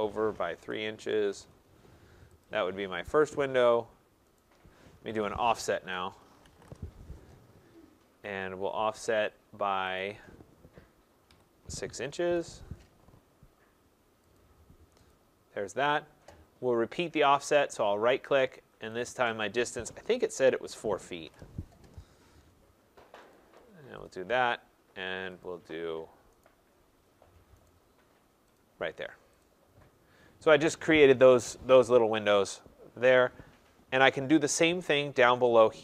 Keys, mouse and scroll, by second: 0.6 3, 1.3 shift+', 2.4 click, 3.1 Return, 3.7 right click, 4.4 right click, 5.0 Escape, 5.2 Escape, 5.9-6.6 typing, 6.7 Return, 9.2-9.9 typing, 12.7 Return, 12.7 click, 12.7 6, 14.4 click, 15.1 click, 17.2 right click, 19.0 click, 20.7-21.3 typing, 23.4 click, 24.1 click, 25.4 click, 26.5 right click, 27.7 right click, 28.6 click, 29.4 click, 30.0 middle click, 30.1 middle click, 30.5 middle click, 31.8-32.4 scroll, 32.4 scroll down 4, 32.8-33.7 scroll down 2, 33.7-34.4 scroll down 3.